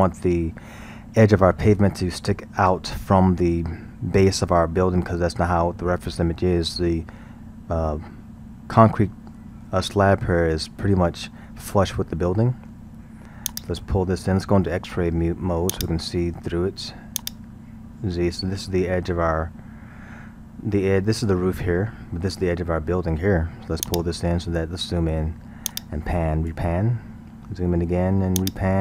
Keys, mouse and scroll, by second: 9.1-13.5 middle drag, 13.5 click, 17.2 click, 23.9 click, 24.8 scroll, 25.7-26.8 drag, 26.8-27.6 scroll, 28.4-28.8 drag.